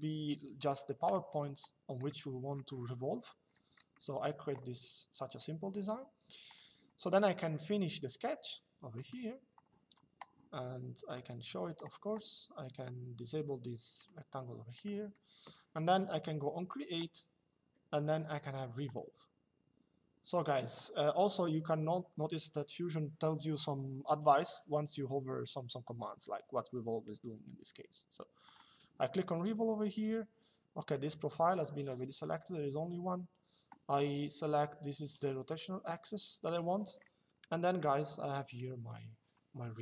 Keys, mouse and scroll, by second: 0.3 click, 0.8 Escape, 1.8 middle click, 3.5 middle click, 8.6 click, 10.8 click, 13.7 click, 14.6 middle click, 16.4 click, 28.2 click, 30.7 click, 35.2 click, 37.5 shift+middle click.